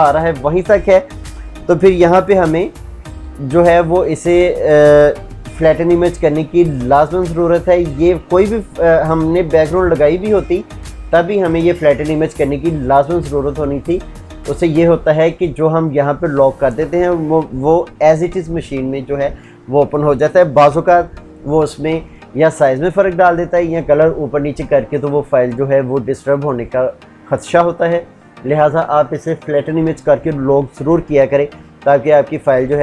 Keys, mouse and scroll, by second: 2.4 ctrl+shift+z.